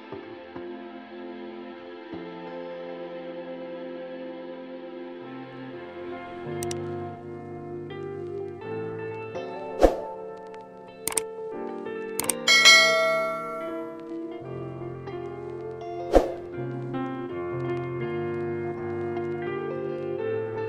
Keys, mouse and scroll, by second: 0.4 scroll, 0.4 click, 1.4 click, 2.0 scroll, 2.1 typing, 3.0 Return, 4.6 click, 5.3 click, 6.5 click, 8.8 click, 10.4 click, 12.7 s, 15.4 click, 17.0 click, 18.4 f.